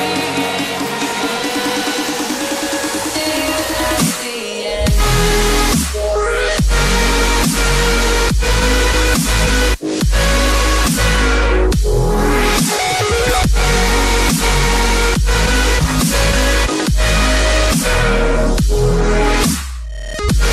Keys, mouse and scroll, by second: 6.4 double click, 6.8 click, 12.1 double click, 12.8 click, 15.5 scroll up 1, 16.0 click, 17.2 shift+click, 18.5 click.